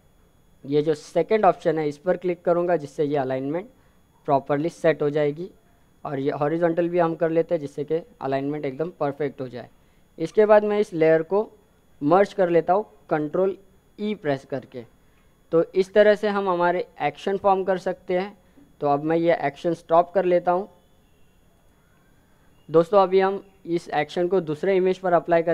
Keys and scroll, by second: 14.0 ctrl+e.